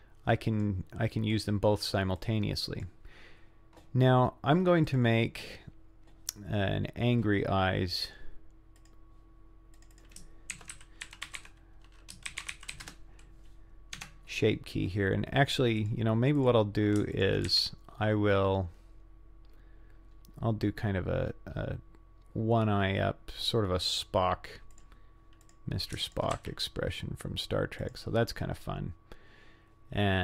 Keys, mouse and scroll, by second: 1.3 click, 2.2 click, 4.9 click, 8.8 click, 9.8 click, 9.9-13.4 drag, 15.8 Tab, 15.8 click, 16.4 click, 17.2 shift+click, 17.5 g, 25.4 click, 26.1 shift+click, 26.4 g.